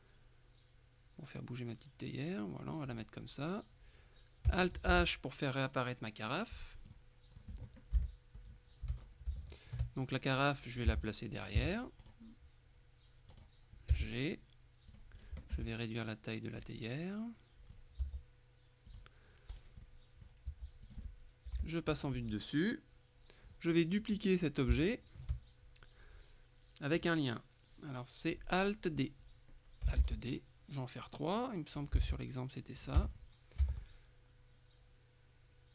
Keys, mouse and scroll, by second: 3.0 click, 5.0 alt+h, 7.0 middle click, 8.0 KP_Decimal, 8.5-9.0 scroll down 1, 9.0-9.4 shift+scroll up 1, 9.4 shift+middle click, 11.0 g, 11.6 Escape, 12.1 right click, 13.4 right click, 14.0 g, 15.0 click, 15.2 right click, 15.6 s, 16.6 click, 18.1 s, 19.0 click, 19.6 right click, 19.9 click, 20.6 s, 20.9 click, 21.6 KP_7, 24.8 shift+middle click, 25.9 5, 27.1 click, 30.1 alt+d, 31.8 alt+click, 32.4 alt+d, 32.8 click, 33.0 Tab, 33.8 Tab, 33.9 click.